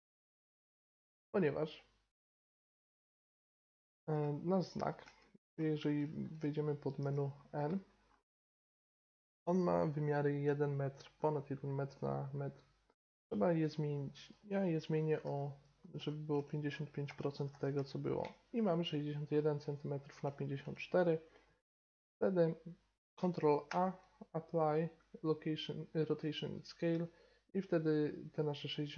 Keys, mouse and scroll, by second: 2.3-4.2 drag, 4.2-4.6 middle drag, 4.6-5.5 right drag, 7.0 n, 10.5-14.2 middle drag, 14.2-16.1 drag, 16.1 5, 17.5 5, 21.5-22.1 middle drag, 23.7 ctrl+a.